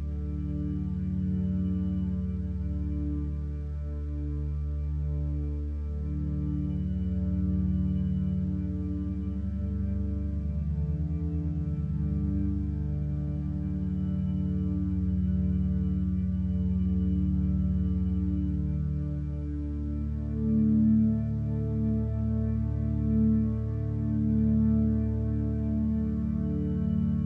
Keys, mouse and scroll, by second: 3.6 ctrl+z, 4.0 ctrl+space, 11.0 ctrl+space, 20.8 ctrl+t, 21.4 ctrl+space.